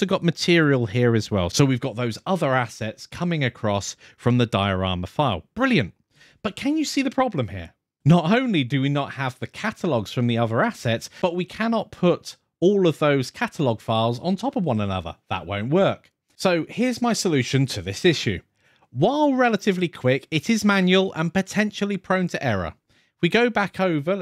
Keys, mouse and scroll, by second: 0.0 click, 0.9-1.4 scroll down 1, 1.4 click, 5.1 click.